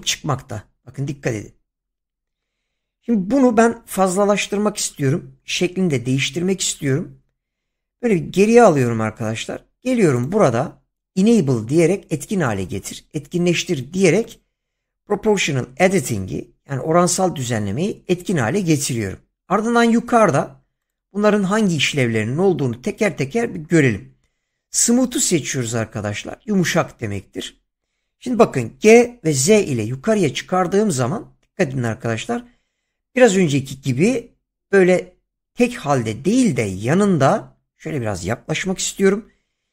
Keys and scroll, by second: 8.1 ctrl+z, 28.7 g, 29.4 z, 38.6 <.